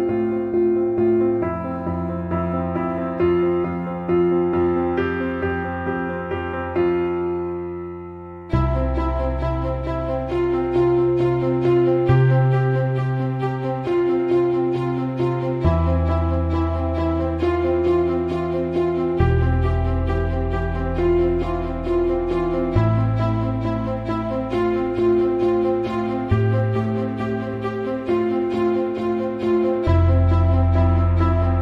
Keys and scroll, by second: 0.5 shift+-, 2.0 BackSpace, 3.6 =, 6.7-10.2 typing, 13.3 v, 26.5 alt+t.